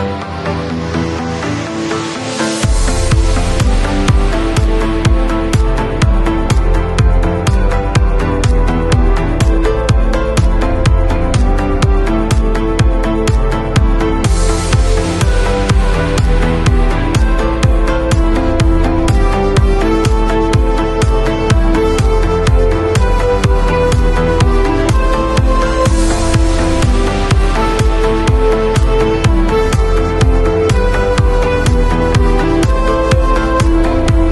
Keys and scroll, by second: 0.2 alt+Delete, 0.9 alt+super+Delete, 1.1 alt+super+d, 1.3 super+v, 1.9 alt+super+v, 4.9 shift+super+e, 21.0 super+t.